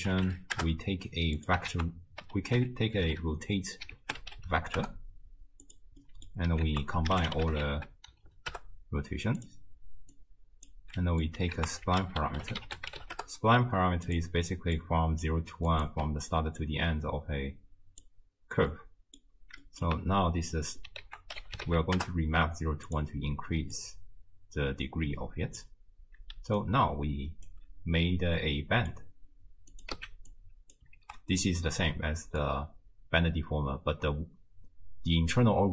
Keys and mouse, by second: 1.7 ctrl+a, 6.0 click, 6.7 ctrl+a, 8.3 Down, 10.2-10.7 drag, 11.0 middle click, 11.6 ctrl+a, 14.4-15.7 d, 14.8 click, 15.7 click, 15.9 d, 16.2 d, 16.6-18.1 drag, 18.7 middle click, 19.6 middle click, 21.1 ctrl+a, 23.8-25.6 drag, 26.4 d, 26.6 right click, 27.5 d, 28.4 middle click, 28.4 d, 29.7 click, 30.0 x, 30.3-30.7 drag, 31.0 ctrl+x, 32.4-35.7 drag.